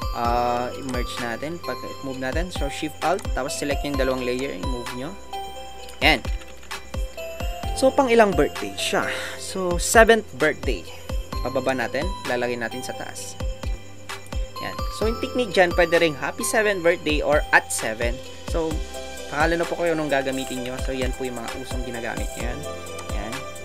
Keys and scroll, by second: 14.8 Down, 15.2 Down, 20.4 Down.